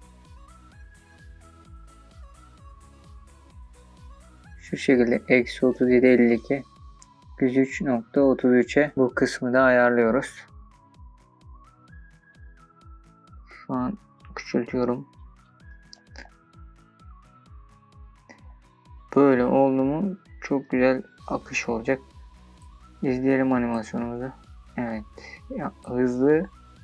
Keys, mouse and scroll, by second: 0.8 r, 1.1 click, 1.2 shift+middle click, 1.4 r, 1.7 click, 1.8-2.3 scroll up 12, 1.9 shift+middle click, 2.5-5.8 typing, 2.7 click, 3.1 click, 3.2 shift+middle click, 3.3-3.6 scroll up 5, 3.8 click, 4.0 click, 4.1 shift+middle click, 4.6 click, 4.7 click, 5.1 click, 5.2 shift+middle click, 5.7 click, 5.9 click, 6.4 scroll up 1, 6.6 scroll down 1, 6.6 shift+middle click, 7.0 s, 7.2 click, 9.4-11.0 scroll down 4, 11.2-11.9 scroll down 4, 13.3 shift+middle click, 13.3 scroll down 1, 13.8-20.6 shift+scroll down 27, 20.6-21.7 scroll down 3, 21.7-22.1 scroll down 1, 22.1-24.2 drag, 24.2 space, 26.3 space.